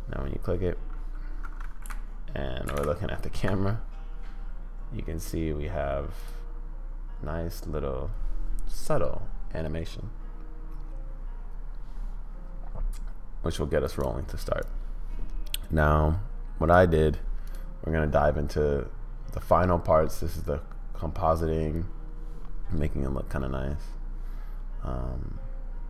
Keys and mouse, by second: 6.2 click, 13.9 click, 14.6-16.9 drag.